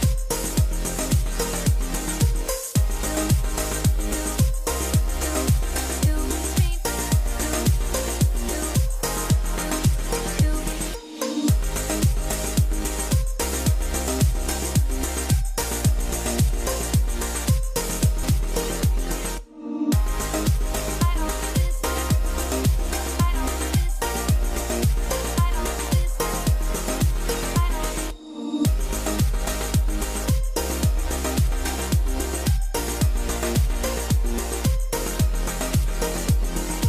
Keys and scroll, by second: 12.6 KP_0, 12.8 Return, 13.1 Return, 13.7 Return, 14.1 Return, 14.7 Escape, 17.7 shift+Escape, 35.3 F12.